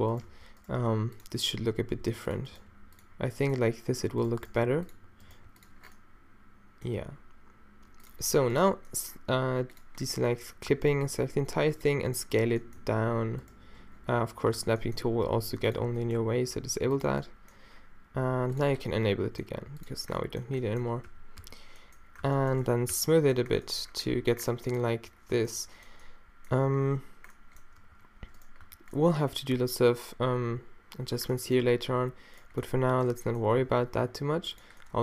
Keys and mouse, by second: 0.3 alt+w, 0.7 g, 2.0 g, 2.5 g, 4.5 g, 5.3 g, 5.8-8.0 middle drag, 8.9-10.7 middle drag, 10.7 e, 11.0 s, 12.8 g, 14.6 shift+Tab, 15.1 s, 16.2 g, 17.0-18.3 drag, 19.4 g, 21.1 q, 21.4 q, 22.3 q, 23.0 q, 25.3 Tab, 26.7 Tab, 27.8 ctrl+r, 28.6 Tab, 29.6 Tab, 32.6-33.7 middle drag, 33.7 e.